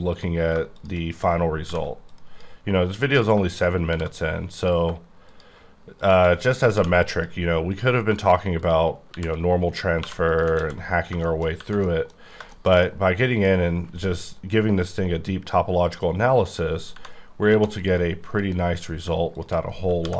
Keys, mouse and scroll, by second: 0.1 click, 1.6 m, 2.1 click, 3.1 click, 3.5 click, 3.9 shift+r, 4.6 click, 6.0 shift+click, 6.7 m, 7.1 click, 7.7 click, 8.6 shift+click, 9.1 shift+r, 10.0 2, 10.3 click, 10.6 ctrl+x, 10.8 scroll down 5, 11.2 shift+middle click, 11.8 middle click, 12.1-12.7 scroll down 4, 12.5 middle click, 12.8 middle click, 17.5 1, 17.8 click, 18.4 KP_Decimal, 18.7-19.0 scroll up 5, 19.3 shift+click, 20.0 m.